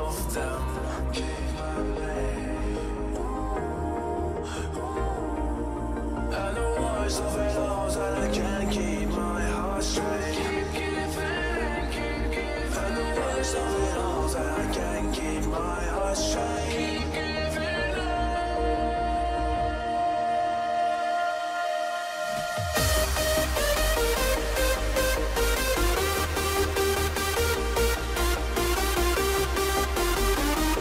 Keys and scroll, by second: 6.9 ctrl+-, 8.4 ctrl+=, 17.9 ctrl+0, 19.2 ctrl+shift+a, 30.5 ctrl+d.